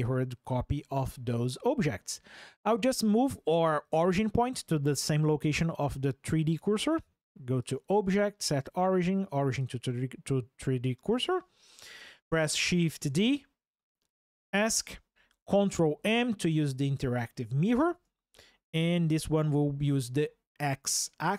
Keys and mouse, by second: 7.4-9.4 right drag, 9.4 click, 12.7 shift+d, 13.9 Escape, 17.4 ctrl+m, 18.4 x.